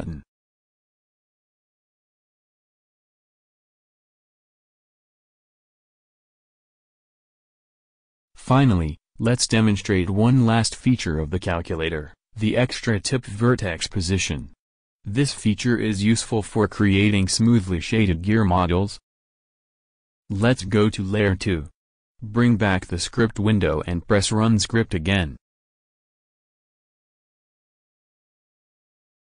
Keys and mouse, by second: 1.1-2.8 drag, 1.8 ctrl+v, 7.6 ctrl+v, 17.0-18.8 drag, 19.8-22.9 drag, 21.6 shift+c, 23.8 click.